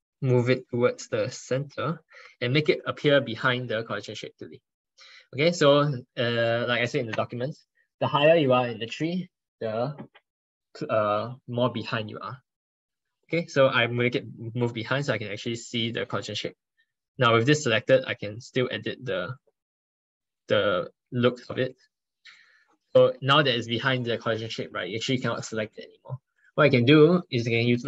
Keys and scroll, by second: 21.4 ctrl+super+z.